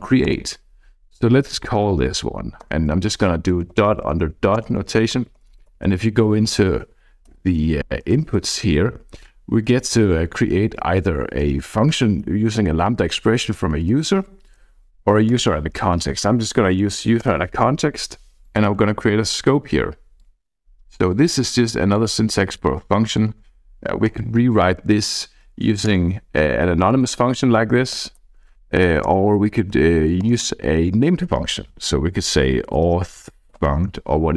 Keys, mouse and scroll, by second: 0.3 Return, 1.0-1.4 Left, 2.7 Return, 3.1 Right, 3.4 Right, 3.7 Right, 3.8 Right, 4.0 Right, 4.1 Right, 4.6 Return, 5.0 Right, 5.1 Right, 5.3 Right, 5.5 Right, 5.6 Right, 5.9 Right, 6.1 Right, 6.3 Right, 7.3 ctrl+space, 9.0 Down, 9.1 Down, 9.7 Down, 9.8 Down, 10.0 Down, 10.6 Up, 10.7 Up, 13.7 Down, 13.8 Down, 14.0 Down, 14.2 Down, 15.3 Return, 16.7 {, 17.2 Return, 19.2 click, 20.1-22.3 drag, 22.5 click, 24.2 alt+Return, 25.9 Return, 28.2 ctrl+z, 29.2 alt+Return, 29.7 Down, 30.4 Return, 32.5-34.2 typing.